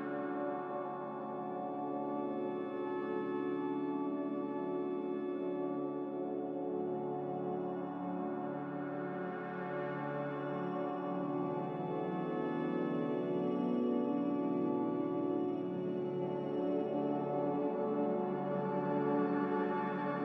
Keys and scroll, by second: 2.1 Delete, 3.0 a, 5.1 ctrl+c, 19.6 m.